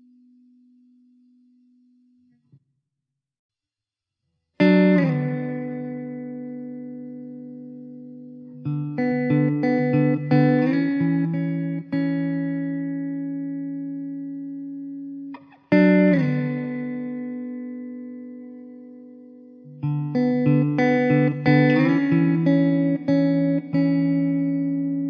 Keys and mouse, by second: 0.5 alt+middle click, 2.9 F4, 4.1 4, 5.2 alt+middle click, 15.8 alt+middle click, 23.4 alt+middle click, 24.5 alt+middle click.